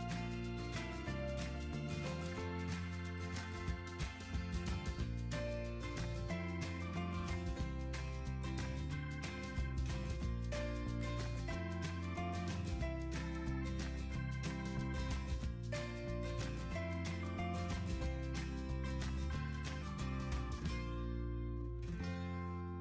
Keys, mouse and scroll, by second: 13.2 3.